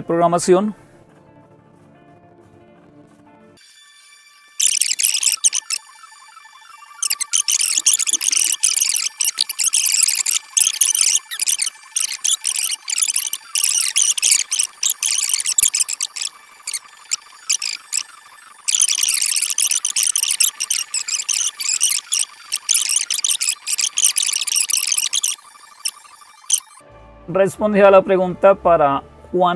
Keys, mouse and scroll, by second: 0.0-29.5 typing, 5.2 click, 12.3-14.5 drag, 15.5 click, 17.1 ctrl++, 17.2 ctrl++, 17.8 click, 18.8 click, 19.7 click, 22.5 Up, 22.7 Down, 22.7 Up, 22.9 Down, 22.9 Up, 23.2 Down, 24.2 Right, 25.3 Down, 25.5 ctrl+x, 26.1 super+1, 26.3 super+2, 26.4 super+4, 26.6 super+6.